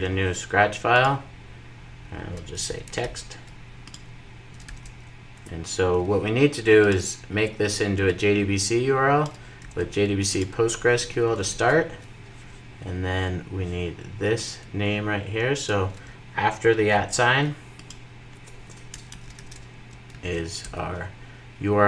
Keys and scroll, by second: 1.7 shift+super+n, 4.5 super+v, 11.2 super+v, 16.7 super+x, 19.1 super+v, 19.8 super+s.